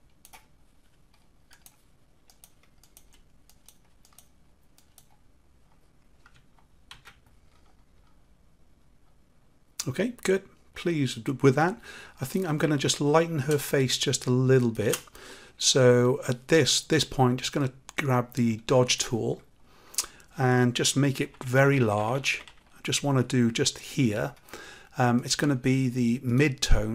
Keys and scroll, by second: 6.8 ctrl+z.